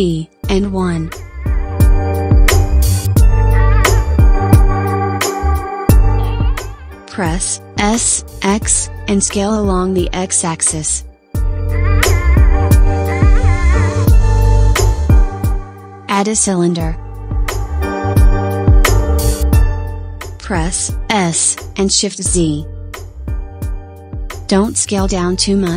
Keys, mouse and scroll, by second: 0.6 click, 1.8 g, 2.4 g, 6.1 s, 6.6 s, 11.3-11.9 shift+middle drag, 11.9 scroll up 4, 12.5-14.3 shift+middle drag, 14.3-15.7 scroll down 3, 15.7 shift+a, 21.4 s, 22.1 shift+z.